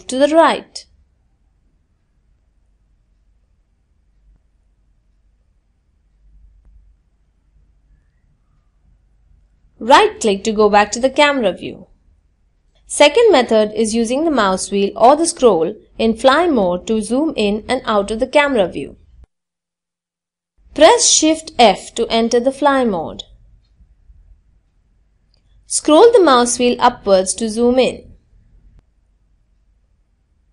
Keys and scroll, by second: 19.4 shift+f.